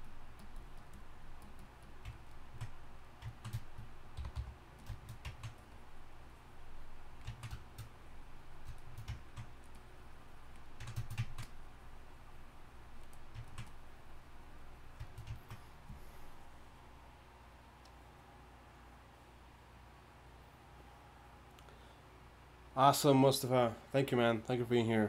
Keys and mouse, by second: 2.5 click, 2.7-4.2 drag, 4.2 y, 4.3 f, 7.3-8.9 drag, 10.7-13.4 drag, 15.1-25.0 drag.